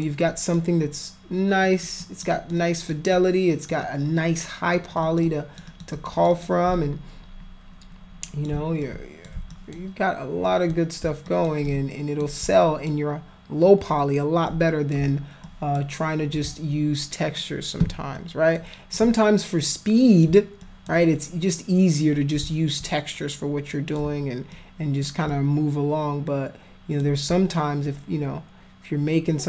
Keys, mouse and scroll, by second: 0.3 alt+click, 1.7 alt+click, 2.1 alt+click, 2.3 alt+click, 2.6 alt+click, 3.1 alt+click, 3.8 alt+click, 4.9 alt+click, 5.0 alt+click, 5.3 alt+click, 5.7 alt+click, 5.9 alt+click, 6.2 alt+click, 6.3 alt+click, 6.8-8.5 shift+drag, 8.9 alt+click, 9.5 alt+click, 10.5 alt+click, 11.3 alt+click, 11.7 alt+click, 12.7 alt+click, 14.5 click, 15.5 alt+click, 18.2 alt+click, 19.0-20.2 alt+drag, 20.7 alt+click, 22.9-24.0 drag, 24.5 alt+click, 25.3-27.0 drag, 27.9-29.4 alt+drag.